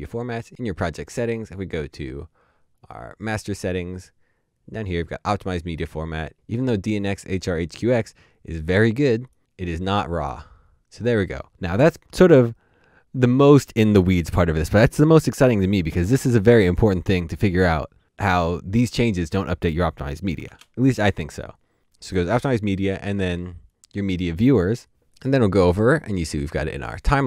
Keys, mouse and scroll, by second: 9.4 double click, 20.3 double click, 20.5 typing, 24.9 typing.